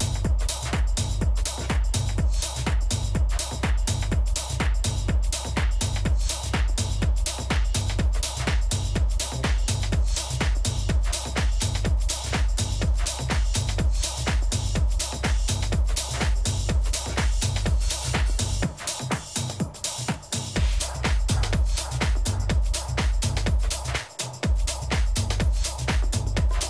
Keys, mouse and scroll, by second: 0.9 a, 2.4 b, 3.9 g, 6.6 a, 7.4 a, 10.6 a, 12.9-13.9 middle drag, 14.7 a, 16.1 a, 23.2-25.5 middle drag, 24.1 b.